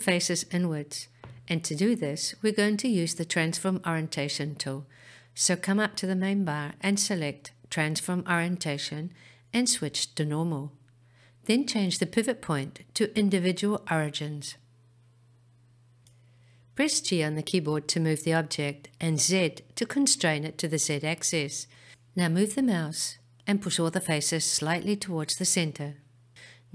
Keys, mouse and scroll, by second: 7.4-15.1 drag, 18.6 g, 21.5 z.